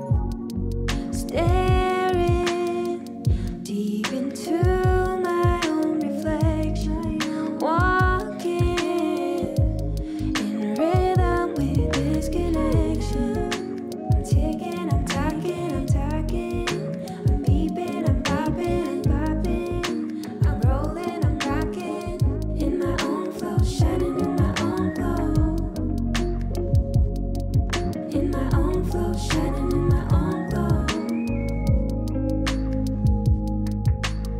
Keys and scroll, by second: 2.7 KP_1, 20.6 ctrl+=, 27.5 ctrl+z.